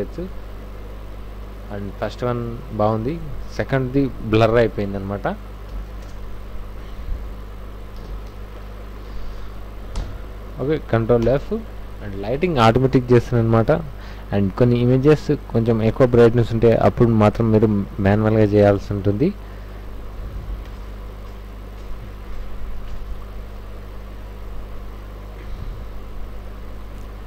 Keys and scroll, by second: 0.1 Right, 1.1 Left, 2.9 alt+Tab, 5.7 alt+i, 5.7 alt+a, 5.9 alt+s, 6.0 alt+Return, 8.0 alt+i, 8.0 alt+a, 8.3 alt+c, 9.9 Return, 11.2 ctrl+f, 20.5 ctrl+a, 20.7 c, 20.8 w.